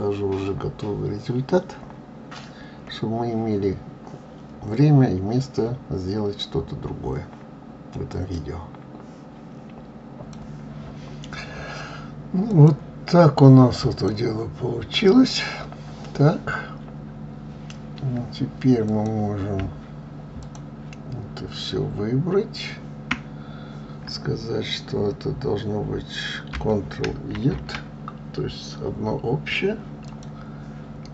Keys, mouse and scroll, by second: 12.8 click, 14.2 click, 15.2 click, 19.2 click, 20.7 shift+click, 30.4 click.